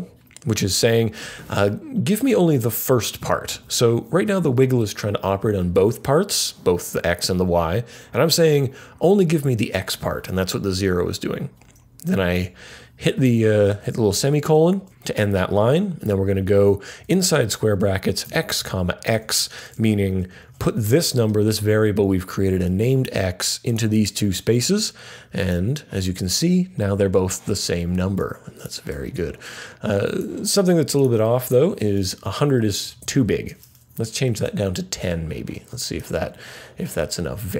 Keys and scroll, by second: 1.5 typing, 12.3 ;, 13.5 typing, 17.0-20.9 typing, 22.4-23.3 typing, 32.2 Left, 32.3 Left, 32.8 Right, 33.0 Right, 33.9 typing.